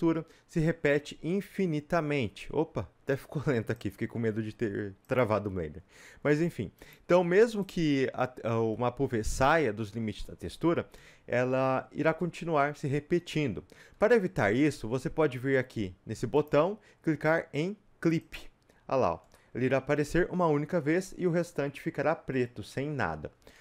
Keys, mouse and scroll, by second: 7.7-9.0 drag, 9.0 a, 9.4 s, 10.9 Escape, 18.3 click, 19.1 scroll down 1, 19.6-23.6 middle drag.